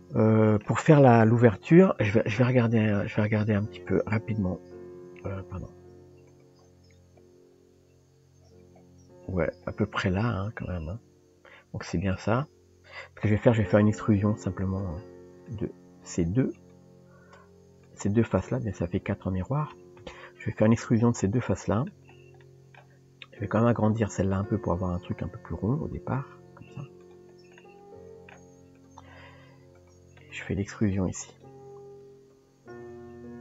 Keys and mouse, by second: 3.1 click, 4.3 KP_1, 6.3 click, 15.5 click, 16.6 click, 17.9 shift+click, 20.0 KP_Decimal, 21.2 middle click, 22.4 middle click, 23.8 click, 27.6 middle click, 28.8 click, 29.8 click, 30.3 click, 32.7 e.